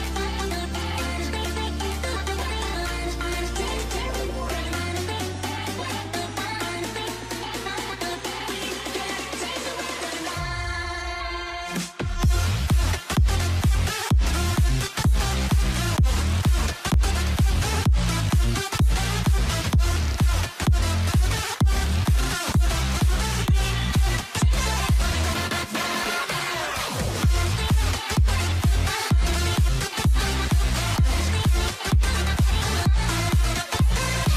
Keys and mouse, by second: 0.3 k, 3.0 k, 4.5 k, 5.8 alt+a, 6.4-7.4 shift+middle drag, 7.6 ctrl+s, 11.8 click, 12.4 ctrl+z, 12.9 click, 14.2 2, 15.4 e, 15.7 alt+a, 15.9 1, 18.9 2, 19.0 3, 19.8 x, 20.4 alt+a, 22.2 2, 22.4-23.9 drag, 24.4 x, 25.5 ctrl+z, 26.5 x, 30.0 x, 32.2 x.